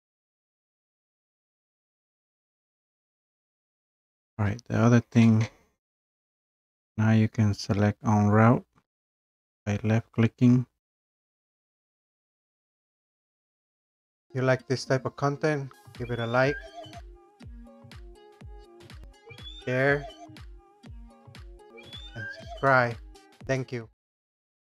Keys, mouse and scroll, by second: 0.0 click, 0.0 right click, 0.7 click, 0.9 click, 1.2 Escape, 1.3 scroll, 1.5 click, 1.7 click, 2.0 click, 2.4 Escape, 3.1 click, 3.2 click, 3.4 click, 3.6 click, 3.7 scroll down 3, 4.0 Escape, 4.1 click, 4.6-5.0 scroll, 5.3 right click, 11.4 click, 12.2 right click, 13.7 click.